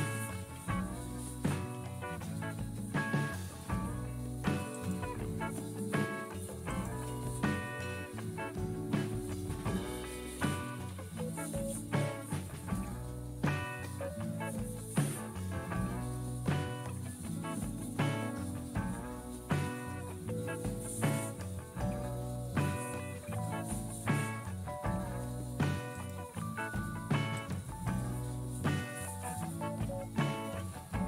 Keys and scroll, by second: 0.0-2.6 typing, 9.8 typing, 11.1-12.9 typing, 15.3 typing, 30.2-31.0 typing.